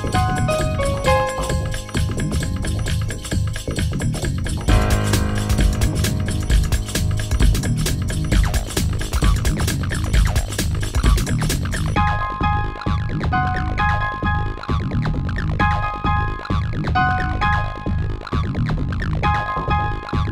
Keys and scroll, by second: 1.9 w, 7.7 ctrl+z, 9.5 space.